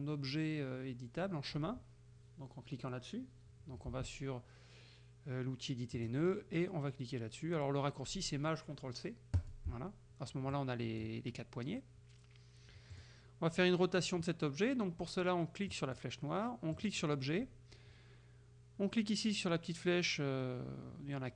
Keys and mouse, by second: 6.0 click, 9.4 click, 10.6 click, 13.0 click, 15.8 click, 16.8 click.